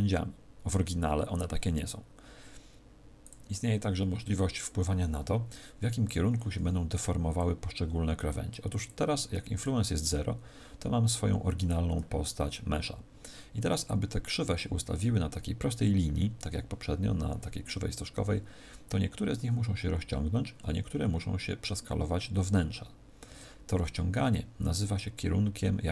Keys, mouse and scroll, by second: 3.2 click, 7.3 click, 8.8 click.